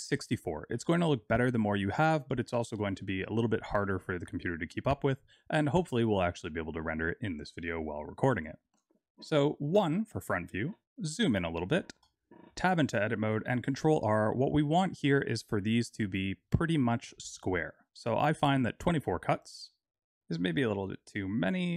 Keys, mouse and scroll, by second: 8.2 click, 9.7 KP_1, 10.7-11.2 scroll up 9, 11.2 shift+middle click, 12.4 Tab, 13.2 ctrl+r.